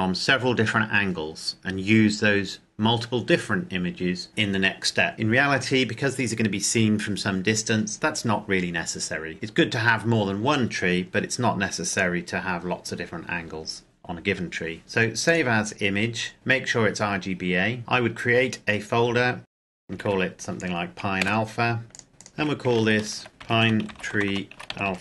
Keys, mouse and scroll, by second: 11.9 click, 15.3 click, 17.8 click, 19.4 click, 19.6-20.4 typing, 21.2 Return, 21.9 click, 22.4 Home, 22.8 ctrl+shift+Right, 23.3-25.0 typing.